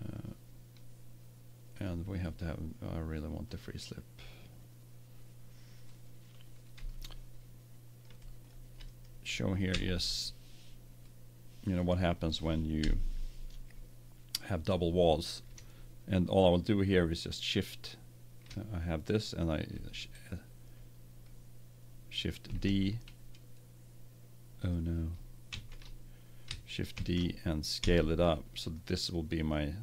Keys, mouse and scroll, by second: 1.7-3.9 drag, 6.8 middle click, 9.7 Tab, 12.7 KP_1, 22.4 shift+d, 25.4 ctrl+z, 26.9 shift+d.